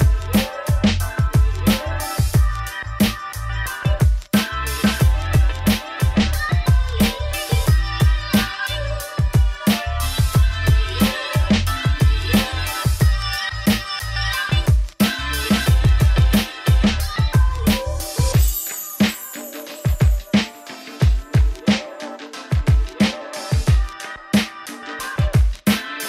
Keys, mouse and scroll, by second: 0.1-5.7 drag, 5.7 Tab, 6.4 ctrl+shift+t, 13.0-25.6 middle drag, 25.6-26.0 drag.